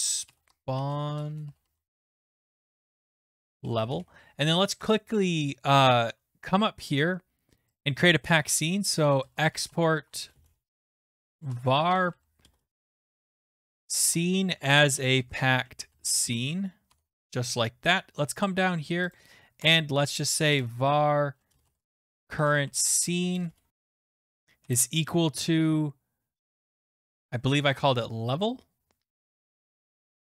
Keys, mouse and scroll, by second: 0.2-4.2 typing, 3.2 click, 5.4-7.0 typing, 6.5 scroll down 1, 6.5-6.9 scroll, 7.8 click, 8.8-16.6 typing, 12.7 click, 16.9 Tab, 17.9-19.0 scroll, 17.9-24.6 typing, 19.0 scroll, 19.1 click, 19.6 Return, 23.3 click, 26.4 i, 27.9 middle click, 28.1-28.8 typing, 28.3-28.6 scroll, 29.2-30.2 scroll.